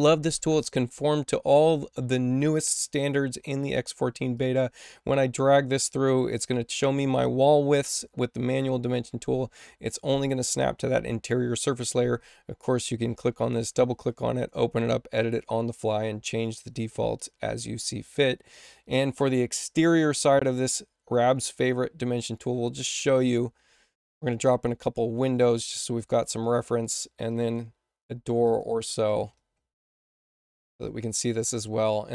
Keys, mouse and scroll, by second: 4.3 click, 23.4 w, 24.1 click, 25.2 click, 25.9 click, 26.3 click, 28.4 click, 30.5 click.